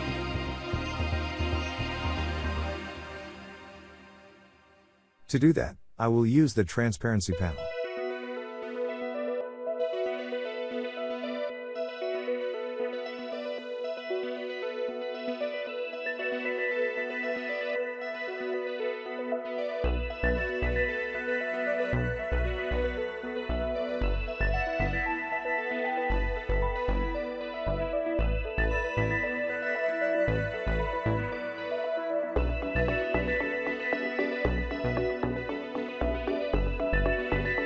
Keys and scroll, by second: 5.0 ctrl+f.